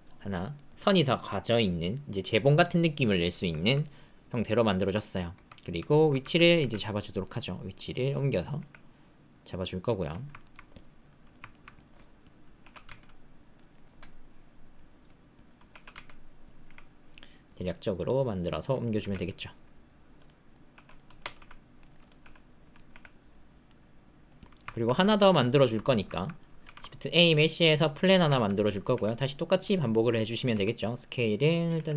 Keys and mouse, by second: 0.5 middle click, 2.1 middle click, 3.6 ctrl+middle click, 3.8-5.7 middle drag, 5.9 shift+middle click, 6.5 g, 8.5 g, 10.3 ctrl+middle click, 11.0 click, 11.5 ctrl+click, 11.7 click, 12.2 click, 12.6 r, 14.2-15.4 drag, 15.6 r, 16.6 g, 17.7 click, 18.4 click, 18.9 g, 20.2 click, 20.7 r, 22.2 r, 22.9 g, 23.6 click, 24.7 ctrl+click, 24.9 click, 25.8 shift+click, 26.1 ctrl+click, 26.6 shift+a, 28.3 ctrl+click, 28.6 click, 28.9 g, 30.1 click, 30.5 s, 31.7 g.